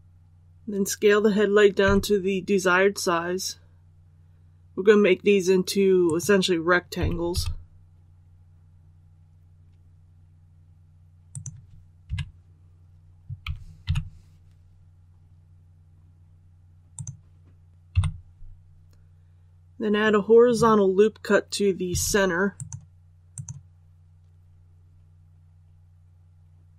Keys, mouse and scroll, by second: 1.7 s, 6.0 click, 6.9 typing, 11.2 click, 12.0 KP_3, 13.3-13.8 typing, 16.9 click, 17.8 KP_1, 22.5 click, 25.9-26.7 scroll up 1.